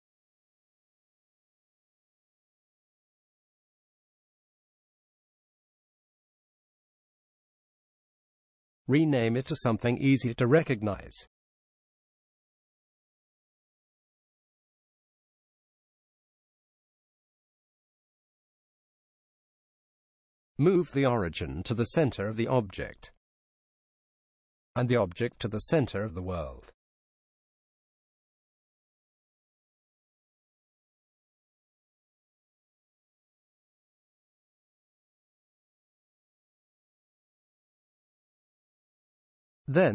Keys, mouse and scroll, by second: 6.6-8.5 drag, 10.3-12.3 right drag, 20.8-22.7 drag, 27.5 alt+g, 29.9-35.4 middle drag, 35.4-37.2 drag.